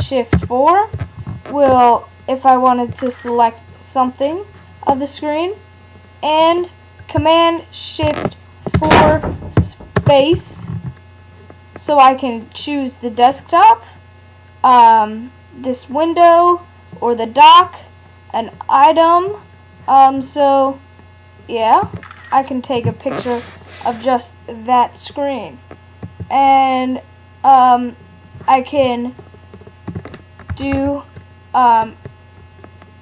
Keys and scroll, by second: 0.3 shift+super+4, 8.8 shift+super+4, 30.5 Return.